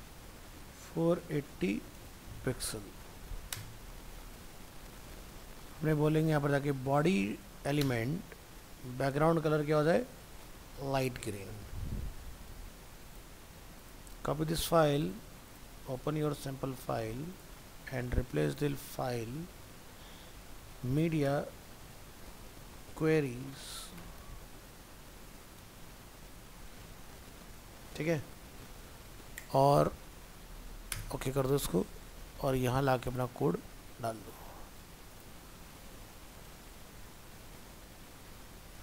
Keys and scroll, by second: 10.5 ctrl+s, 16.1 alt+f, 16.3 alt+移, 18.0 ctrl+Tab, 19.6 ctrl+shift+Left, 33.6 ctrl+v.